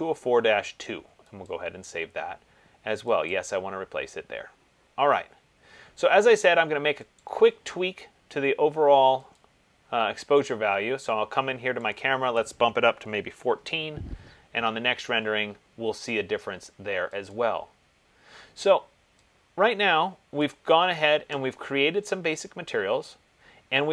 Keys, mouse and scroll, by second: 1.7 click, 3.6 click, 7.4 click, 9.6 click, 12.8 click, 13.3 typing, 17.6 click, 20.5 click.